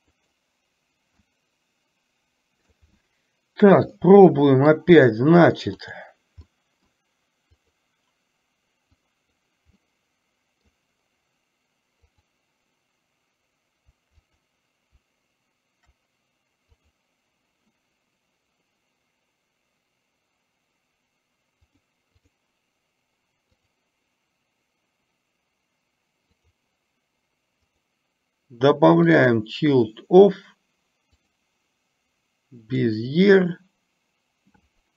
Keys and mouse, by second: 1.3-2.7 middle drag, 4.1-4.8 middle drag, 6.0 click, 6.6-7.0 middle drag, 7.7 click, 9.1 click, 9.8-10.7 middle drag, 12.2 click, 14.3 click, 17.0 click, 21.8 click, 23.7 click, 26.3 click, 27.7-29.5 drag, 31.3-33.0 drag.